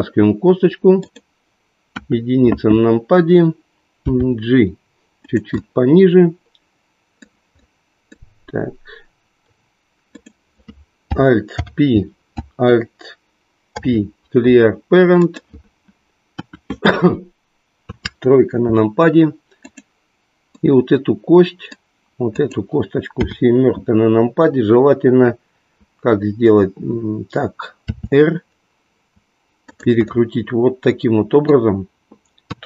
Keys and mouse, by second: 2.0 KP_1, 4.1 g, 5.3 click, 5.6-8.2 middle drag, 11.4 alt+o, 14.3 alt+p, 16.3 KP_1, 17.8 KP_3, 19.7 click, 21.3 middle click, 22.4 click, 23.3 KP_7, 27.8 r, 30.1-31.7 middle drag.